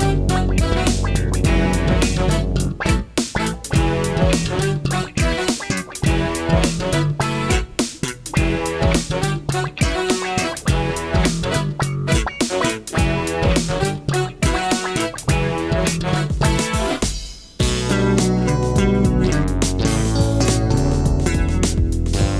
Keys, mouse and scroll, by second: 1.3 click, 2.0 click, 4.1 click, 4.6 click, 5.7 click.